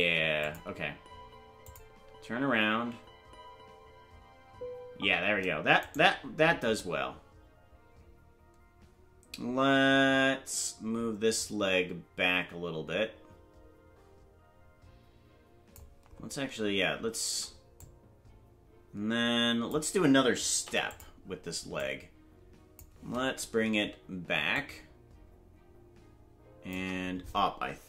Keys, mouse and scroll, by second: 0.0 space, 0.4 click, 1.7 click, 4.9 space, 5.9 right click, 6.8-15.8 drag, 17.8-19.7 drag, 20.6 i, 21.8-22.8 drag, 24.5-26.8 shift+drag.